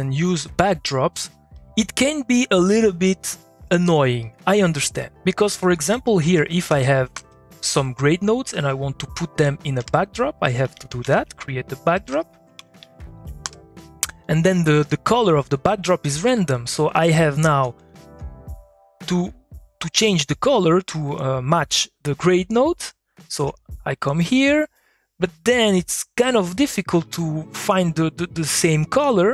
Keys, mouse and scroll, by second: 1.5 click, 5.3 click, 6.2 g, 6.7 g, 7.1 g, 7.6 middle click, 8.5-9.8 drag, 9.8 Tab, 10.4-13.1 typing, 13.1 Down, 13.4 Return, 14.2 click, 15.5 click, 17.2 ctrl+click, 18.6 click, 23.2 ctrl+click, 24.0-29.0 drag, 29.0-29.3 drag.